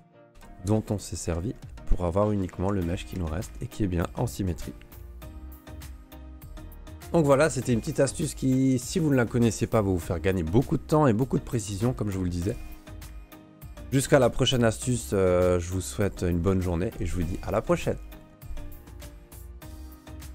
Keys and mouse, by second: 0.3 Delete, 1.3 ctrl+s, 1.5 middle click, 2.4 middle click, 2.7 Tab, 3.1 a, 3.5-4.3 middle drag, 5.0 q.